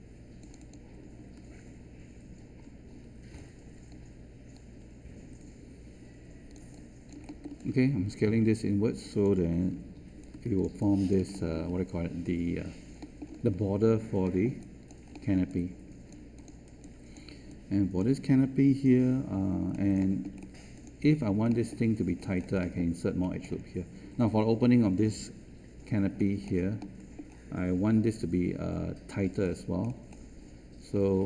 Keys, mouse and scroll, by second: 9.7 3.